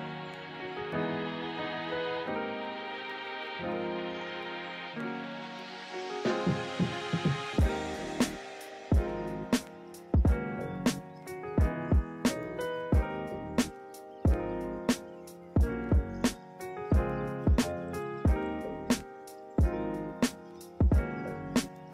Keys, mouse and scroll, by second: 2.0 ctrl+-, 2.3 ctrl+=, 7.1 ctrl+-, 7.4 ctrl+=, 9.0 ctrl+=, 9.6 ctrl+-, 9.9 ctrl+=.